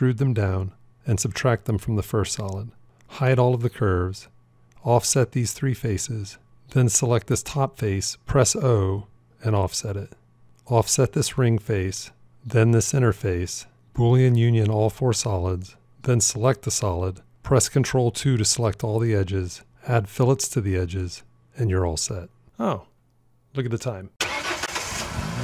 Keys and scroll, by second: 8.7 o, 15.1 q, 18.6 ctrl+2.